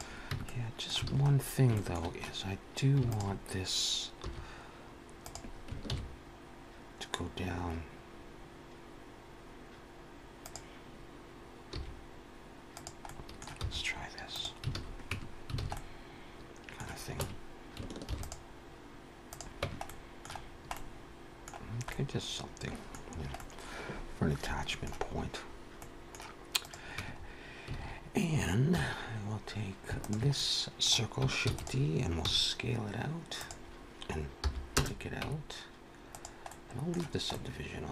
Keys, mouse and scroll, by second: 0.2 Tab, 0.4 middle click, 1.0 alt+a, 1.1-1.6 scroll up 2, 1.6 shift+middle click, 3.0 alt+shift+click, 4.1 s, 5.6 ctrl+b, 11.8 s, 12.9 middle click, 13.5 e, 15.0 alt+a, 15.0 Tab, 15.5 alt+a, 15.6 middle click, 17.1 Tab, 17.9 ctrl+r, 19.5 Tab, 19.8 middle click, 20.3-20.6 scroll down 3, 20.6 middle click, 21.5-21.8 scroll down 2, 21.8 middle click, 22.9-23.3 scroll down 2, 23.3 middle click, 25.0-25.7 scroll up 2, 25.7 middle click, 26.5 click, 26.8 Tab, 27.0-27.6 scroll up 4, 27.6 alt+a, 28.6 2, 29.8 alt+shift+click, 30.3 middle click, 31.4 shift+d, 32.1 s, 34.7 p, 35.1 Tab, 36.2 click, 36.4 middle click, 37.2 middle click.